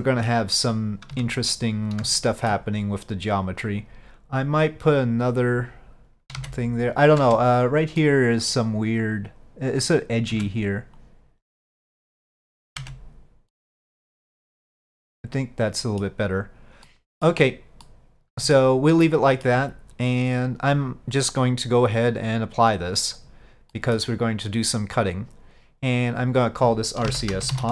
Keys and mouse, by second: 1.2 Tab, 2.3 shift+middle click, 5.1 click, 6.5 ctrl+z, 7.3 Tab, 8.1-8.6 middle drag, 10.4 Tab, 11.1-12.8 drag, 13.6-16.1 middle drag, 16.9-17.3 middle drag, 17.9-18.6 middle drag, 19.1-19.5 shift+middle drag, 22.0-22.8 drag, 23.8 middle click, 26.1-27.7 drag.